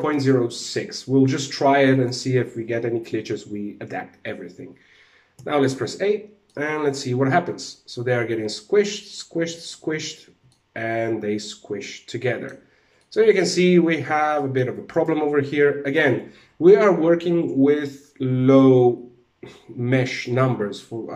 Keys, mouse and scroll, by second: 1.4 click, 4.8 alt+a, 6.0 middle click, 9.8 alt+a, 9.9 middle click, 12.5 middle click, 12.8 shift+middle click, 13.0 shift+middle click, 13.3-13.8 scroll up 3, 13.8 middle click, 14.4 right click.